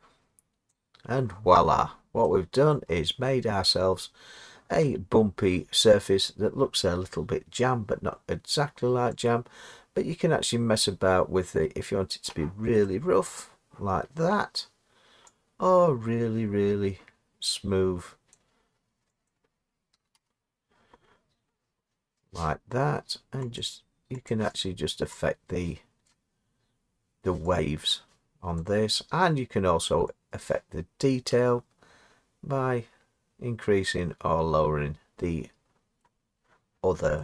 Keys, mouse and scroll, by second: 0.7 click, 2.7 middle click, 3.4 middle click, 3.4 middle click, 5.5 middle click, 12.2 click, 13.3 middle click, 18.3 click, 19.3 click, 20.0 0, 20.1 KP_0, 23.6 click, 24.3 click, 24.6 click, 26.1 click, 35.1 click, 36.0 middle click.